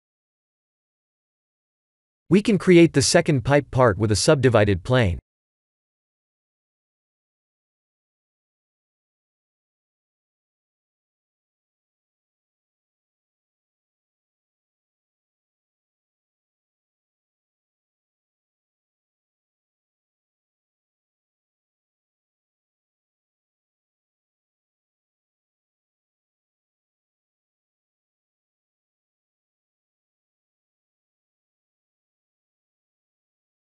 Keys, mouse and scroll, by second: 1.2-1.8 scroll down 4, 3.1 click, 3.8 shift+a, 9.3 ctrl+3, 9.9-10.7 scroll up 6, 10.7 s, 13.7 KP_7, 14.2 shift+z, 15.1 g, 19.3 middle click, 20.6 KP_3, 21.5 KP_1, 22.2-22.9 scroll down 2, 22.9-23.6 scroll down 1, 23.6 scroll down 2, 25.6 Tab, 26.1 e, 27.2 g, 28.1 r, 29.7 g, 33.3 e.